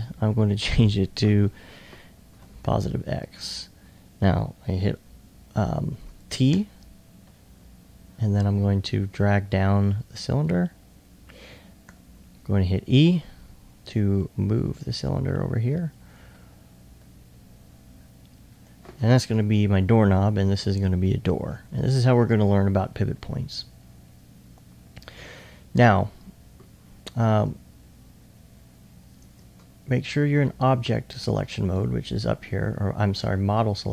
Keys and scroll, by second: 2.4 typing, 6.1 typing, 12.1 e.